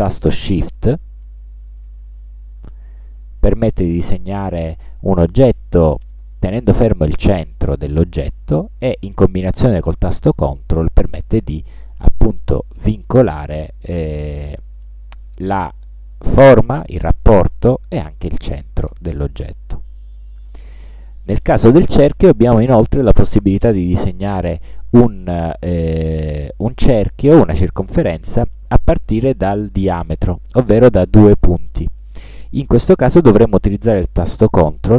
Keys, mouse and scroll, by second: 3.2-20.4 shift+drag, 20.9-22.1 ctrl+shift+middle drag.